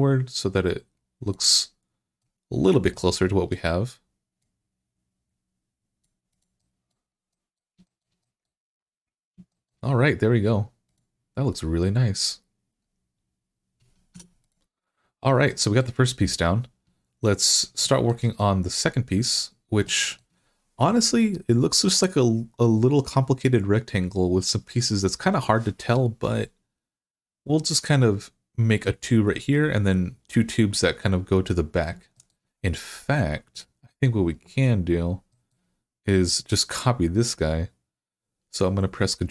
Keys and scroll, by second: 14.0 Tab.